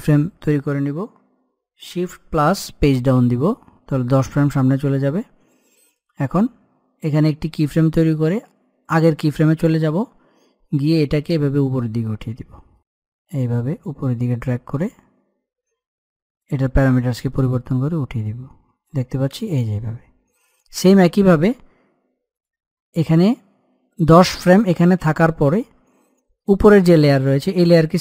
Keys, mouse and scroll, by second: 2.5 shift+Num_Lock, 2.5 click, 2.9 shift+Page_Down, 6.8-12.5 drag, 12.5 middle click, 13.3-22.1 drag, 26.7 click.